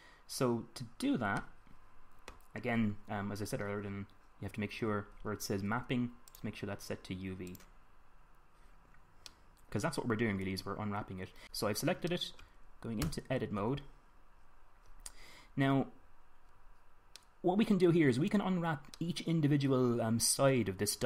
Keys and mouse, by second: 5.7-7.0 middle drag, 7.0-9.3 drag, 9.3 middle click, 11.4 m, 12.2 click, 13.7 Tab, 15.5-16.9 middle drag, 19.9-21.0 middle drag.